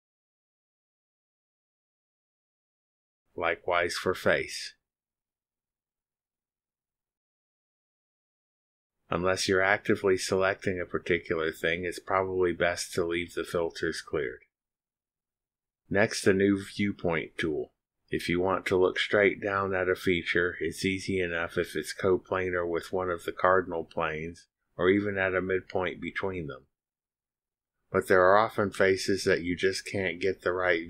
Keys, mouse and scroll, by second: 1.5 click, 2.6 click, 4.4 click, 5.0 click, 5.6 click, 6.9 click, 7.4 click, 8.1 click, 10.0 click, 10.9 click, 14.3 click, 19.3 click.